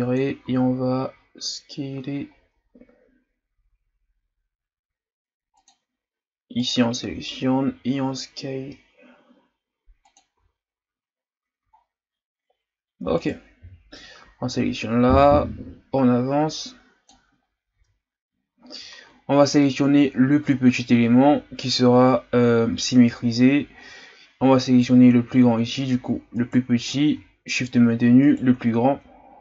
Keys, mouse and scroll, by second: 0.4 s, 6.6 right click, 7.1 s, 10.4 z, 11.3-13.1 scroll down 2, 13.1 right click, 13.6 l, 14.5-17.6 drag, 17.7 Tab, 18.7-19.5 scroll down 3, 19.5-20.1 scroll up 2, 20.1-20.5 scroll down 2, 20.5-20.8 shift+scroll up 2, 24.6 right click, 26.3 right click, 28.3 shift+right click.